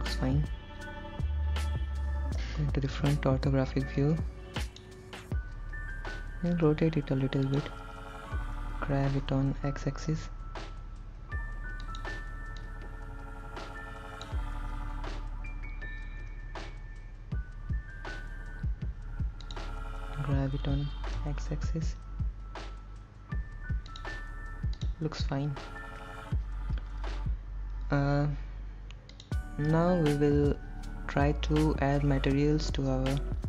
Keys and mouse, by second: 2.6 KP_1, 4.2-6.4 drag, 6.8 r, 7.7 click, 9.1 g, 10.3 x, 12.1 click, 12.9-14.6 drag, 16.5 r, 19.7 click, 20.6 g, 21.4 x, 24.1 click, 25.0 click.